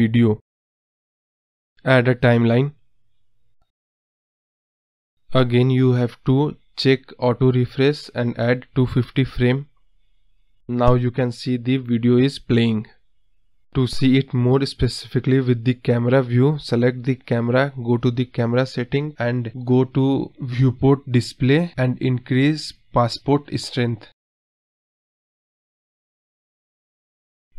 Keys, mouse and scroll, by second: 1.4 space, 2.2 space, 2.9-5.7 drag, 5.7 space, 7.1 space, 8.5 click, 10.8-12.4 drag, 12.4 space, 14.7 KP_0, 15.5-16.3 scroll up 1, 16.3-17.2 scroll down 1, 17.5 space, 19.0 click, 21.4-23.2 drag, 23.2 space, 25.3 space, 25.7-27.5 drag.